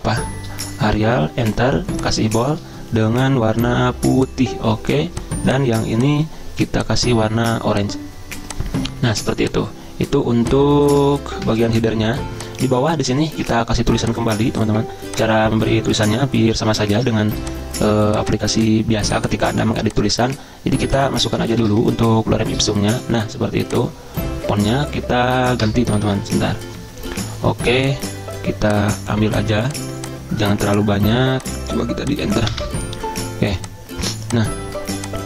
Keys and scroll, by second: 0.0-0.4 typing, 1.1 Return, 11.0 ctrl+a, 11.4 ctrl+], 11.5 ctrl+], 15.6 Return, 15.9 Return, 17.0 super+m, 21.5 ctrl+c, 21.8 alt+Tab, 22.8 ctrl+v, 25.6 BackSpace, 26.2 ctrl+shift+Down, 32.4 Return, 32.6 Return.